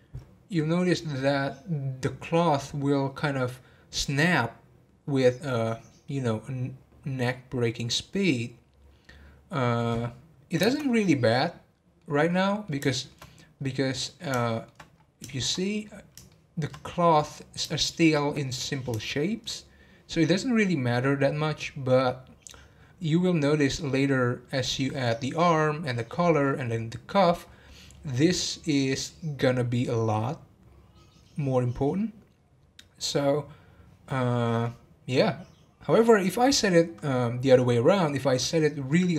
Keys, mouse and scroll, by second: 10.6 space, 11.1-13.6 middle drag, 13.6 scroll up 1, 13.8-14.9 middle drag, 14.9-15.3 scroll up 2, 15.3-15.9 shift+middle drag, 15.9-16.3 scroll down 2, 16.3-19.7 shift+middle drag, 19.7-20.3 scroll down 1, 20.3-22.6 scroll down 1, 22.6 scroll down 1, 25.5-25.9 scroll down 3, 27.4 scroll up 2, 29.7-30.5 scroll up 4, 35.0-35.6 scroll down 2.